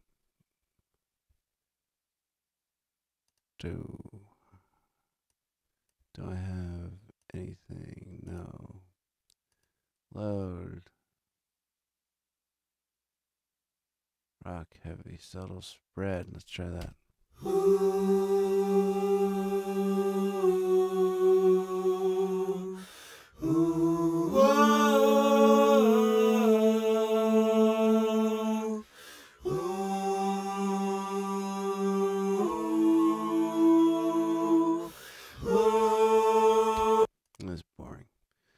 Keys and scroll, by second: 16.7 space, 36.7 space.